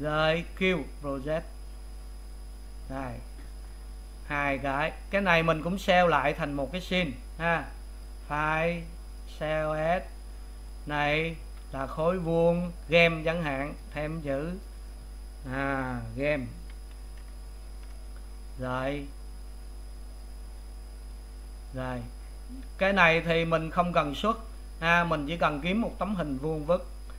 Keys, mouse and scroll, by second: 2.1 u, 3.6 click, 6.7 click, 9.2-21.1 drag.